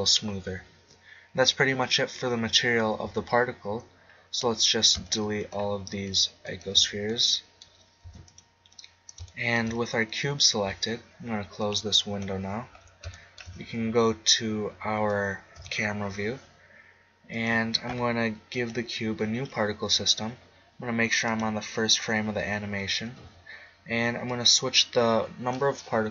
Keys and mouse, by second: 0.4-2.6 middle drag, 3.0 z, 4.1-6.0 drag, 7.0-8.3 drag, 8.0 x, 11.6 middle click, 11.9-14.7 drag, 14.7 middle click, 15.5 KP_0, 17.3-20.4 drag, 21.2-23.2 drag, 24.3-26.1 drag.